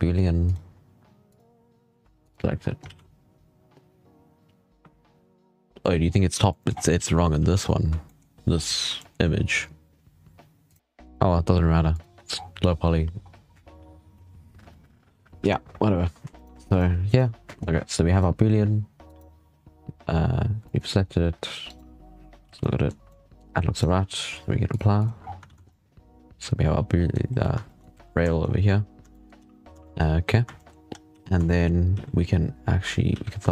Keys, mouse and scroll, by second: 0.4-1.2 drag, 2.7 alt+a, 5.9-6.4 scroll down 6, 6.4 shift+middle drag, 6.6-6.9 scroll up 8, 6.9 z, 7.3 z, 7.5-7.9 scroll down 6, 7.9 shift+middle click, 8.4-8.9 scroll up 5, 8.9 shift+middle drag, 9.1 scroll down 1, 12.2-12.8 scroll down 8, 12.8-13.2 scroll up 4, 15.6-16.0 scroll up 2, 16.2 right click, 16.6 right click, 16.9 right click, 18.0 right click, 18.9 right click, 20.5 shift+middle click, 20.9-21.4 scroll up 3, 21.5 right click, 22.2 scroll up 1, 22.3 h, 22.5-23.6 middle drag, 23.6 right click, 24.6 click, 25.1 scroll down 3, 25.3 alt+a, 25.5 scroll up 2, 25.6-27.1 middle drag, 27.5 shift+middle drag, 27.8 z, 28.1 shift+middle click, 28.3 scroll up 6, 28.9-29.2 shift+middle drag, 29.2 z, 29.4 scroll down 7, 29.7-30.7 shift+middle drag, 30.7 scroll up 3, 30.9-33.5 typing, 31.3-31.8 shift+middle drag, 33.4-33.5 shift+middle drag.